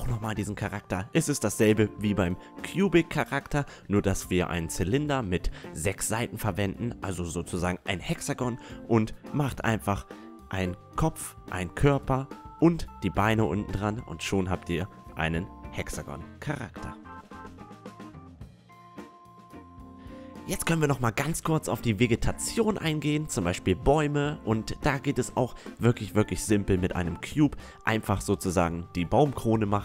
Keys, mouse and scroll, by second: 0.0 s, 4.9 KP_1, 6.8-7.6 drag, 8.6 Tab, 9.5 i, 10.3 e, 13.0 e, 13.8 Tab, 13.9 Tab, 22.6 Tab, 25.2 i.